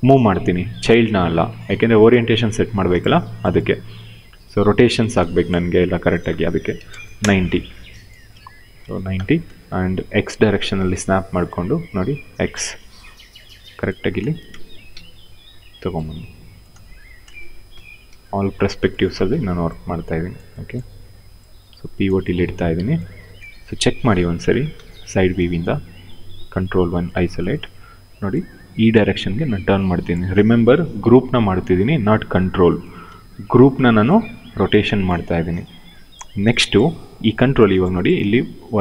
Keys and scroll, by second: 3.9 e, 5.9-6.9 typing, 8.0 w, 8.5 space, 10.5 x, 13.7 space, 14.6 f, 16.4 space, 17.4 f, 23.1 space, 24.4 f, 26.3 ctrl+1, 27.4 e, 32.7 w.